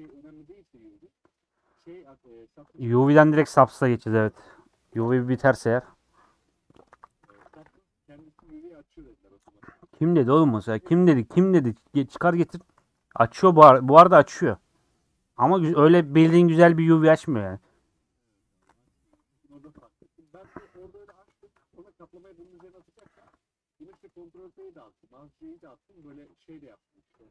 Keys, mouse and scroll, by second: 22.2 middle click, 22.7 1, 23.1 click, 24.4 g, 25.6 click, 26.1 g, 27.0 click.